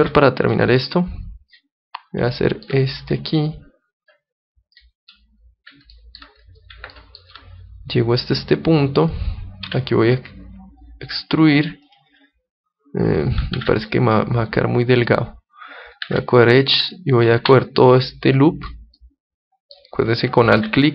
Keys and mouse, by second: 0.5-2.4 drag, 2.4-4.0 middle drag, 3.1-5.0 drag, 5.1-8.6 middle drag, 7.9-9.8 drag, 9.6 e, 11.0-12.8 drag, 11.8-13.7 right drag, 13.5 ctrl+Tab, 16.0 ctrl+Tab, 17.1-18.9 right drag, 18.0-19.7 drag, 19.0-20.6 middle drag, 20.5 KP_1.